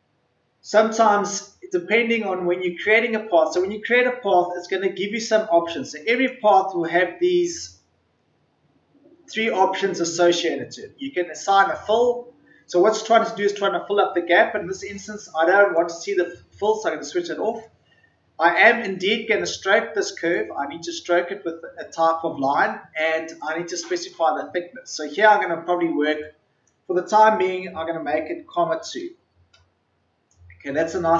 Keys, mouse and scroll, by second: 6.1 click, 28.7 KP_2.